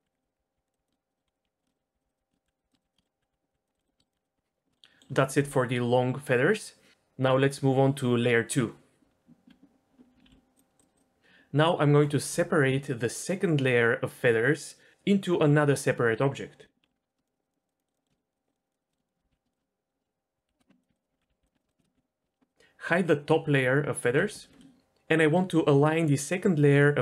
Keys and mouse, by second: 0.0-4.1 typing, 1.1 click, 1.4 click, 1.7 click, 1.9 click, 9.2 Tab, 10.2 alt+h, 16.9 Tab, 17.3 shift+click, 17.5 shift+click, 17.8 shift+middle click, 18.3 shift+click, 18.6 shift+click, 19.3 ctrl+l, 19.5 shift+click, 19.6 middle click, 20.4 p, 20.9 Tab, 21.1 Tab, 21.3 alt+a, 21.3 l, 21.4 p, 21.5 Tab, 21.9 ctrl+j, 24.0 h, 24.5 shift+middle drag.